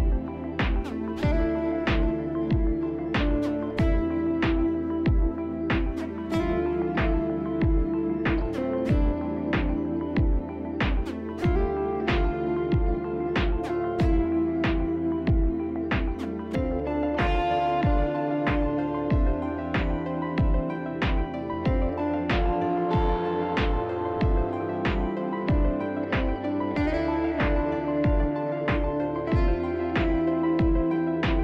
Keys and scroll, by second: 3.0 ctrl+z, 4.4 f, 6.3 1, 14.4 f, 19.5 z, 21.8 f, 26.6 b, 30.0 3, 30.1 Return.